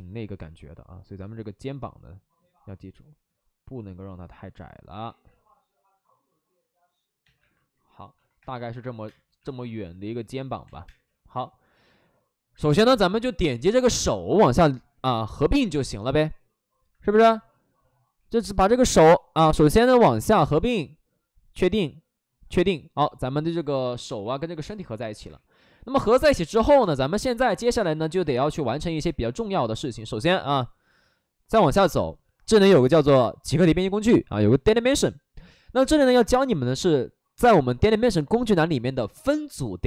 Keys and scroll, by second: 5.0 ctrl+z, 5.2 ctrl+z, 7.1 2, 8.3 2, 9.0 space, 10.6 2, 10.8 space, 16.8 Escape, 19.9 ctrl+w, 23.3 shift+f, 23.7 shift+f, 24.0 2, 24.1 2, 25.2 2, 30.0 2.